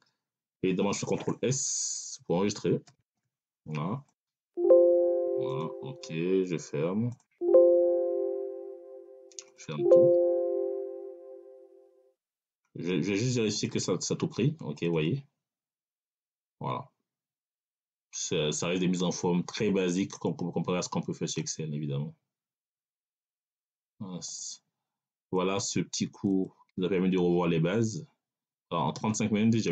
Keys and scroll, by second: 2.7 ctrl+s.